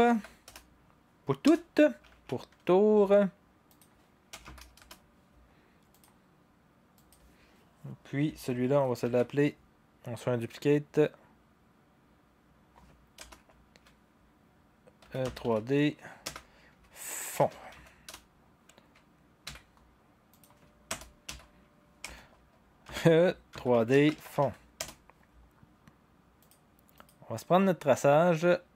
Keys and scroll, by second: 0.0-0.6 typing, 1.4 Return, 2.1 Right, 3.5-4.8 typing, 4.8 Return, 5.9-6.7 typing, 9.0 ctrl+d, 13.1 Return, 14.8-18.2 typing, 19.4 typing, 20.9 Return, 22.0-25.4 typing, 27.2-27.9 typing.